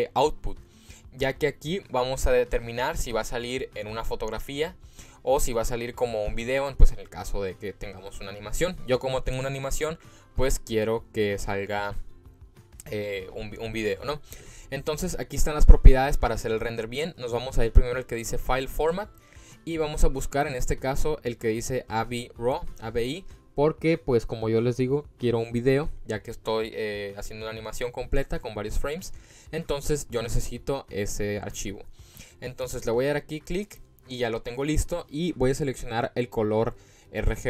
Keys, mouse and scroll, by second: 18.7-30.4 drag.